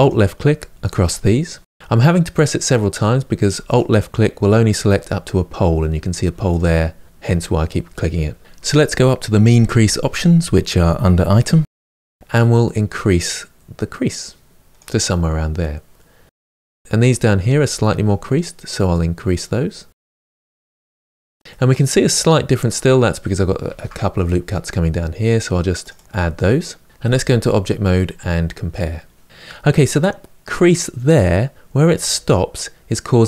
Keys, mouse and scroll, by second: 0.9 alt+shift+click, 1.3 alt+shift+click, 3.4 alt+click, 7.0 alt+shift+click, 12.1-16.3 drag, 17.4 ctrl+click, 18.8-21.2 drag, 21.2-23.4 shift+middle drag, 23.4 ctrl+r, 26.9 Tab, 27.7-28.5 scroll down 1, 28.5-33.2 middle drag.